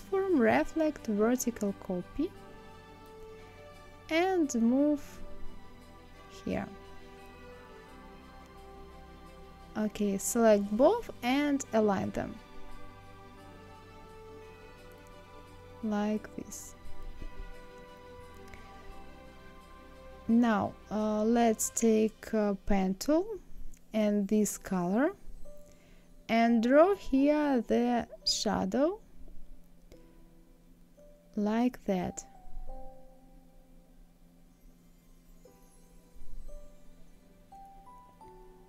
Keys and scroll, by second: 12.6 Right, 14.4 Down.